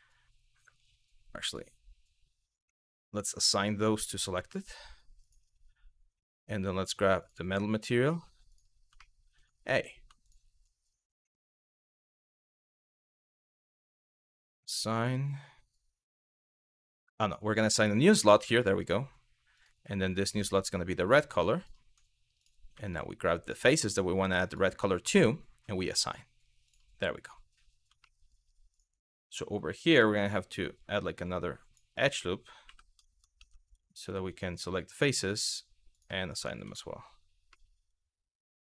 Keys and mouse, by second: 1.1 click, 2.2 click, 4.9 click, 6.0 click, 8.2 click, 8.7 shift+middle click, 9.9 alt+click, 12.0 click, 13.7 click, 17.2 click, 19.2 click, 21.2 alt+click, 22.5 alt+click, 24.1 alt+click, 25.5 click, 26.3 click, 27.8 shift+middle click, 28.4 click, 29.5 click, 30.3 click, 32.3 2, 33.1 3, 35.1 click, 35.6 click, 36.4 Tab, 37.3-38.7 middle drag.